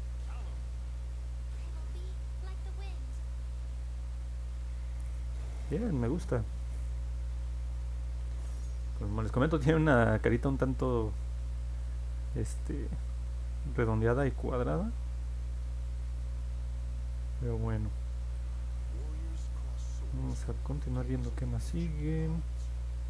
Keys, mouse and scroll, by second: 1.7 click, 2.1 click, 2.5 click, 2.8 click, 3.1 click, 3.3 click, 3.6 click, 4.1 click, 4.4 click, 7.6-8.2 scroll down 4, 9.3 scroll down 2, 9.8 middle click, 10.8-18.3 alt+drag, 18.9 alt+middle click, 19.7-20.3 scroll down 2, 20.7-23.0 alt+drag.